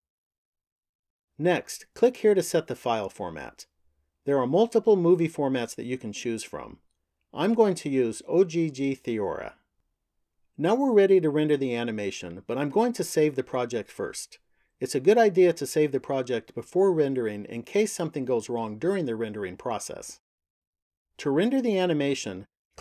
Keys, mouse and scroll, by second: 1.0 click, 3.0 click, 14.8 click, 21.3 click.